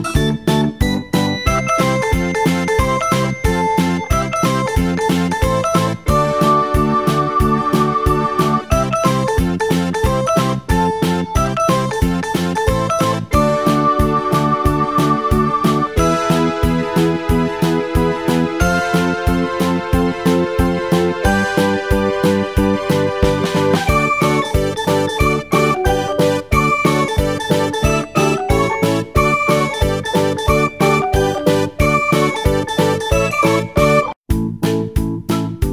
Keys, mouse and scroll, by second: 2.9-4.6 drag, 9.8-12.2 drag, 20.7-22.3 scroll up 2, 22.3-24.0 scroll up 2, 25.0-28.1 drag, 33.3-35.7 drag.